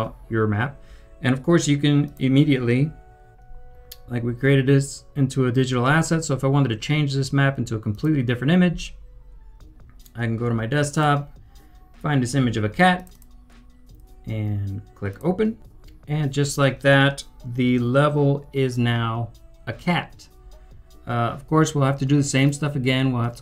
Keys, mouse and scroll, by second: 0.6 typing, 3.6-4.4 typing, 13.1 double click, 15.6 double click.